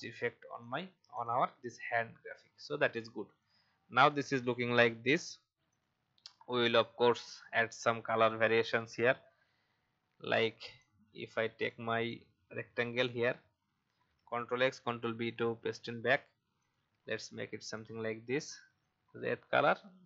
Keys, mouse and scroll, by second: 3.0 click, 5.7 click, 14.1 ctrl+x, 14.7 ctrl+b, 15.2 ctrl+v, 16.6 click.